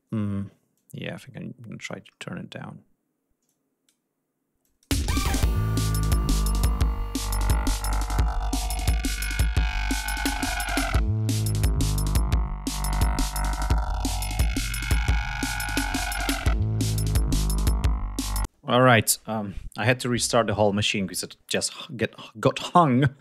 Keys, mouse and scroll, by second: 0.4-1.6 drag, 1.7-2.4 scroll down 2, 3.1-3.7 drag, 4.2 click, 4.5 space, 4.8 ctrl+scroll up 2, 6.8-11.7 drag, 11.8-12.1 scroll up 2, 12.7-13.4 scroll up 4, 14.9 click, 16.3 ctrl+scroll down 2, 16.7 ctrl+scroll up 2.